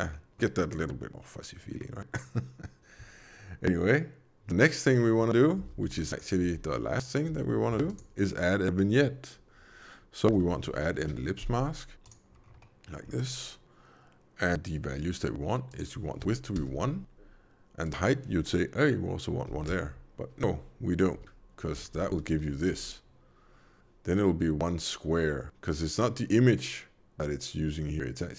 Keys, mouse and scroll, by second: 0.0 middle click, 1.7 middle click, 4.9 middle click, 5.5 alt+a, 5.8 b, 6.3 g, 7.3 alt+a, 10.3 l, 12.3 scroll down 2, 12.5 middle click, 13.0-13.3 scroll up 3, 15.6 click, 17.7 click, 21.1 alt+v, 21.7-22.6 typing.